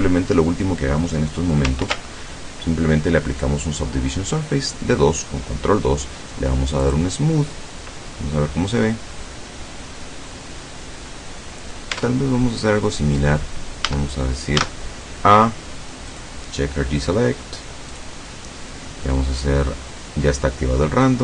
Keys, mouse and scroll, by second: 1.9 ctrl+2, 6.9 click, 8.1-11.9 middle drag, 12.0 Tab, 12.4-12.7 scroll up 1, 13.2 scroll down 1, 13.9 a, 14.7 a, 16.2 click, 18.0 click, 21.1-21.2 drag.